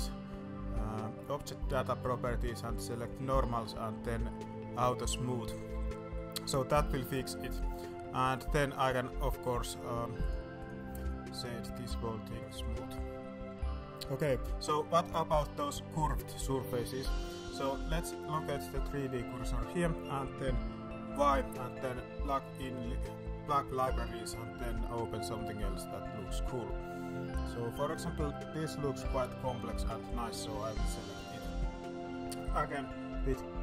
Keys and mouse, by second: 3.1 click, 4.7 click, 5.8 middle drag, 6.7 alt+a, 7.0-7.4 middle drag, 7.6 middle drag, 8.3-8.8 drag, 8.9 click, 9.4 middle drag, 10.5 click, 11.0-12.4 drag, 12.9 middle click, 13.1 middle click, 13.4 alt+a, 13.6 middle drag, 14.1 middle drag, 14.6 shift+middle drag, 16.2 middle click, 16.6 middle drag, 17.0 shift+middle click, 17.6-18.6 drag, 18.6 middle click, 19.0 middle click, 19.3 middle drag, 21.0 y, 31.8 middle drag, 32.6 middle drag, 32.9 middle click.